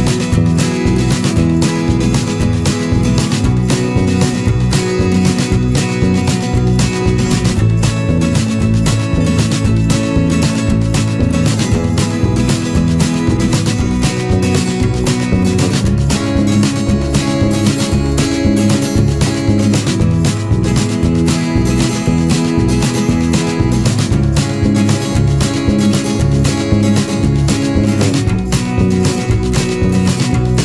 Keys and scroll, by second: 3.1 ctrl+-, 10.0 ctrl+z, 11.9 Return, 26.8 ctrl+-, 27.0 ctrl+0.